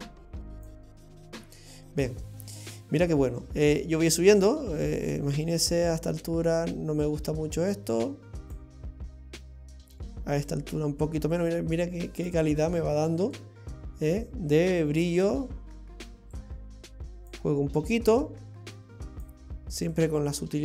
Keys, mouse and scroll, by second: 3.7 click, 10.5 click, 13.4 click, 16.4 click, 18.2 click, 19.9 click.